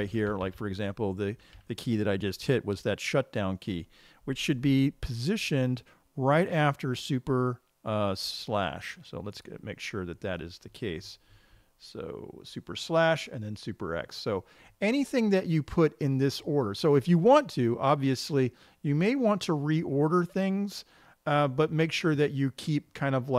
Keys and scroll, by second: 0.5 Page_Down, 0.6 Down.